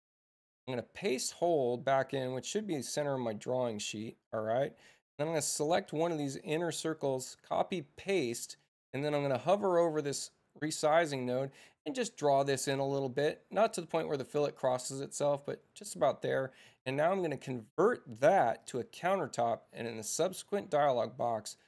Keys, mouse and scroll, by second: 1.3 shift+c, 5.2 click, 7.4 c, 10.0-15.2 drag, 17.3 g, 18.6 click, 18.9 Return.